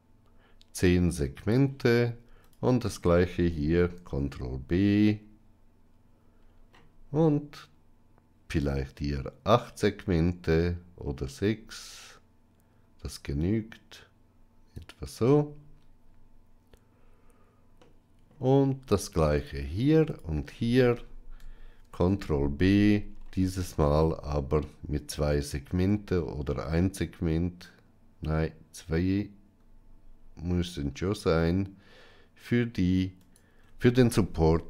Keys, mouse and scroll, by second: 3.9 ctrl+b, 17.8 middle click, 21.7 ctrl+b.